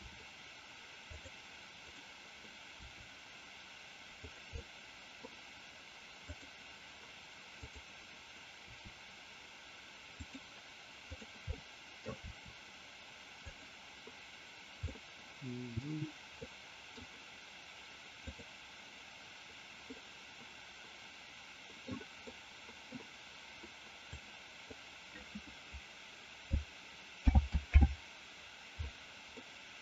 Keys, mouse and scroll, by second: 4.2 click, 4.6 middle click, 7.6-8.1 drag, 8.6 r, 10.1 click, 11.5 middle click, 12.2 r, 14.9-15.7 middle drag, 16.4 middle click, 18.1 click, 20.0-22.0 middle drag, 22.2-23.0 middle drag, 24.1-24.7 drag, 27.2 alt+g, 27.7 alt+r, 29.4-29.8 middle drag.